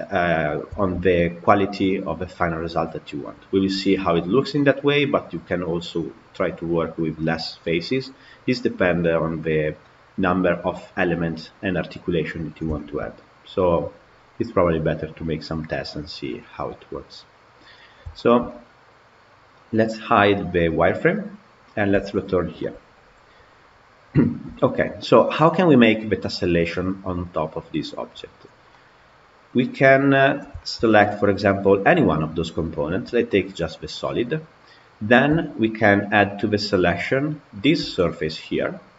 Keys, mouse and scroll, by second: 0.6-8.8 shift+middle drag, 8.8 click, 12.6-16.9 shift+middle drag, 16.9-17.2 scroll down 2, 17.4 click, 17.8 scroll down 2, 18.0-19.7 shift+middle drag, 19.7-21.1 drag, 21.8 KP_Decimal, 22.5-23.2 middle drag, 23.2 scroll down 2, 24.0-27.7 shift+middle drag, 28.6-30.0 middle drag, 30.0 click, 30.4-31.6 shift+middle drag, 31.6 click, 37.3 shift+click.